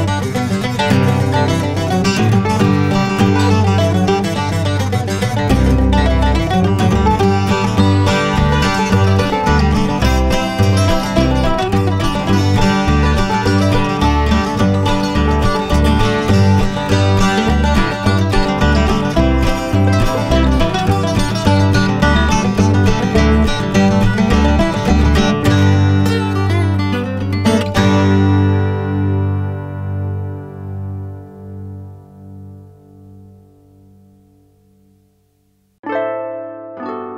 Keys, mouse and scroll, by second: 1.9 click, 4.3 i, 4.7 click, 8.8 alt+shift+scroll up 2, 9.1 alt+scroll down 2, 9.7 click, 11.0 click, 12.5 click, 14.6 scroll up 1, 15.3 click, 21.9 click, 22.4 BackSpace, 22.6 click, 25.2-26.1 typing, 25.7 click, 26.2 click, 29.4 BackSpace, 30.2 click, 30.8 BackSpace, 30.9 click, 31.0 BackSpace, 31.2 click, 33.5 z, 33.6 click, 35.4 ctrl+z, 36.0 ctrl+z, 36.3 ctrl+z, 36.8 typing.